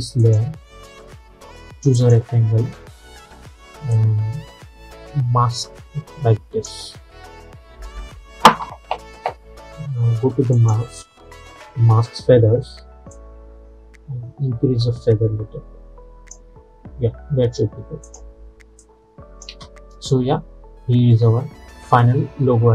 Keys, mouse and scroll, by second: 10.6 click, 13.2-19.6 drag, 19.6 space.